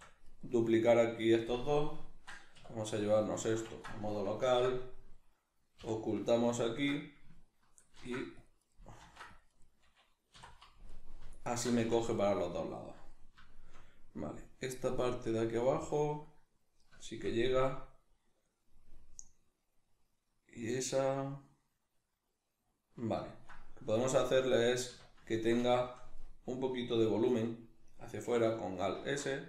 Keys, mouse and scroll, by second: 0.4 right click, 2.6 \, 3.1-8.7 middle drag, 4.4 ctrl+i, 5.8 h, 7.9 ctrl+r, 8.7 right click, 9.0 ctrl+r, 9.6 right click, 10.3 3, 10.9 alt+right click, 11.5 alt+shift+right click, 11.7 x, 13.5-29.4 shift+middle drag, 24.9 a, 29.0 alt+s.